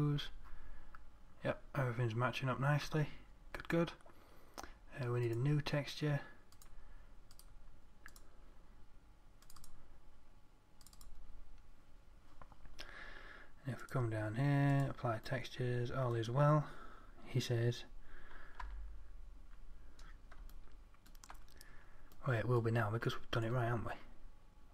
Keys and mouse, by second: 15.9-19.1 middle drag, 19.1 Tab, 24.5-24.7 middle drag.